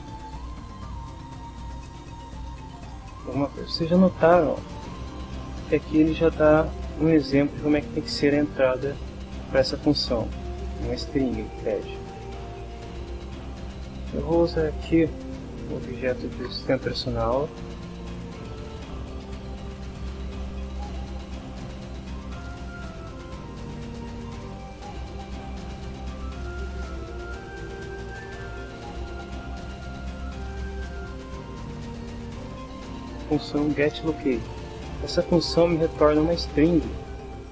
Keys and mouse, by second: 0.0-1.6 typing, 2.2 Return, 3.4 BackSpace, 4.1 shift+9, 12.2 click, 13.0 click, 15.1-16.1 typing, 17.5-20.5 typing, 24.8 Down, 27.3 Down, 32.3-33.7 drag.